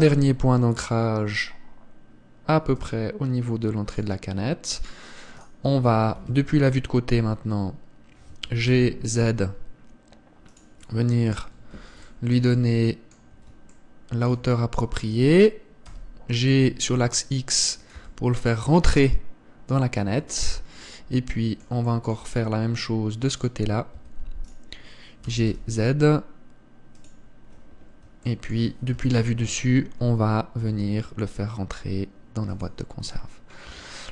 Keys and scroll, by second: 6.8 KP_1, 16.6 g, 18.6 Tab, 24.6 Tab, 29.6 KP_7, 31.2 g.